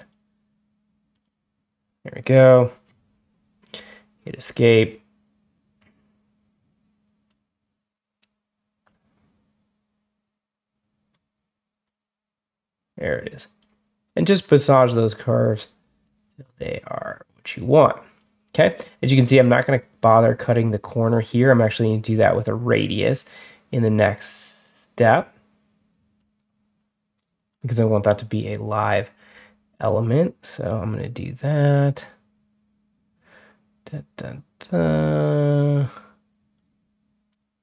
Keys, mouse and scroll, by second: 1.0 click, 3.3 Escape, 4.7-7.1 drag, 8.7-11.0 drag, 11.7-13.5 drag, 15.9-18.0 drag, 19.9 click, 21.9-24.9 drag, 26.0-27.4 drag, 29.7-30.5 drag, 31.5-37.2 drag.